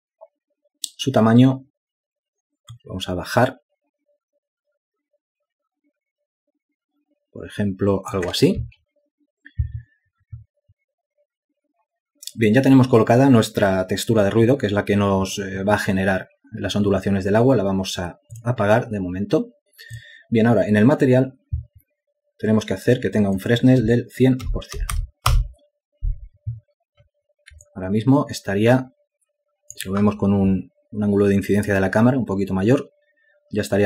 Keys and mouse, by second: 28.1 alt+click.